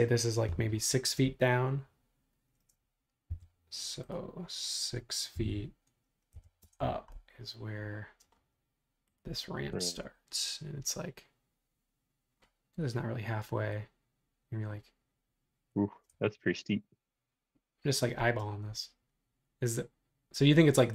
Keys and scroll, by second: 3.3 l, 5.3 6, 6.3 ', 6.6 Return.